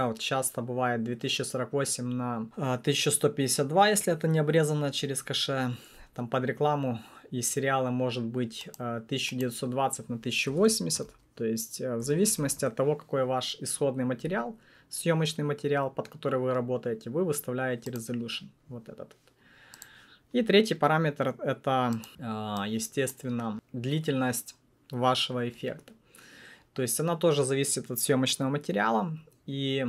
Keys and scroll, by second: 10.2-12.9 typing.